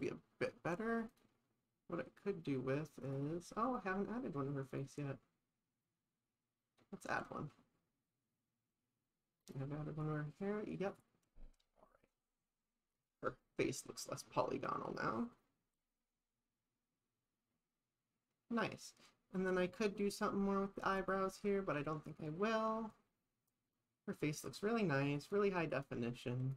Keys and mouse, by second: 1.2 click, 3.1 click, 3.7-8.5 drag, 9.5 click, 10.1 click, 25.8 click.